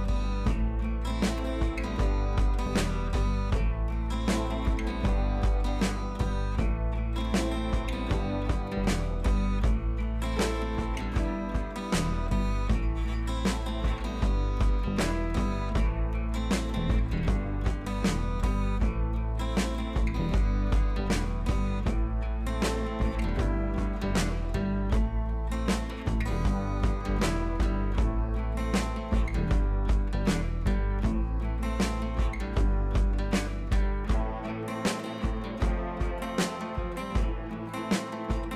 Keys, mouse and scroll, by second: 1.2-1.6 click, 2.3 Up, 5.1-7.0 drag, 10.3 Right, 12.5 Right, 13.5 click, 13.6 Right, 14.1 click, 14.3 Down, 15.3 click, 15.5 Up, 16.0 click, 16.1 Up, 16.5-17.3 click, 17.7 scroll up 1, 18.0 Right, 21.6 shift+click, 22.2 c, 22.7 click, 23.7 Left, 25.6 click, 26.0-27.1 scroll down 1, 27.5 scroll up 1, 28.8-29.6 drag, 30.1-30.7 shift+drag, 33.2 shift+click, 34.2-35.7 drag, 35.5 right click, 36.5-37.3 drag, 38.0-38.3 shift+click.